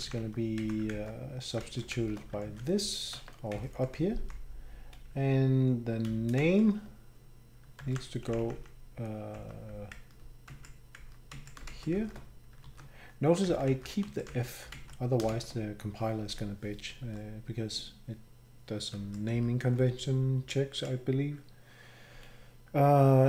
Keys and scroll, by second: 0.9 Down, 1.6 ctrl+shift+Right, 1.9 shift+Left, 2.4 ctrl+v, 3.1 Escape, 3.7 Escape, 4.0 Escape, 4.2 Down, 6.4 ctrl+shift+Right, 7.8 ctrl+c, 8.6 Up, 9.9 Up, 9.9 ctrl+Left, 10.5 Right, 11.0 Left, 11.3 Right, 11.9 shift+Left, 12.6 ctrl+v, 13.5 ctrl+Left, 13.7 ctrl+Left, 14.0 Right, 14.3 Right, 15.3 shift+Right, 17.0 Down, 18.9 Right, 19.3 Down, 19.8 Down.